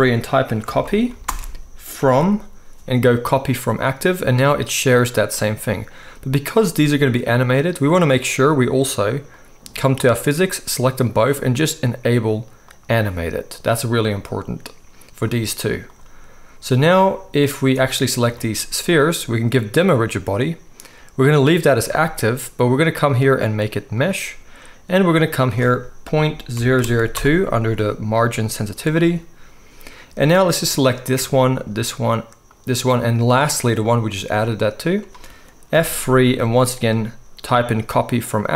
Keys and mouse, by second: 4.5 click, 4.6-9.3 middle drag, 9.3 click, 9.4-12.7 middle drag, 12.7 click, 12.8-15.9 middle drag, 15.9-17.8 drag, 17.8-19.8 middle drag, 19.8-30.5 drag, 26.7 0, 31.5 shift+click, 32.5-33.9 shift+drag, 35.7 F3.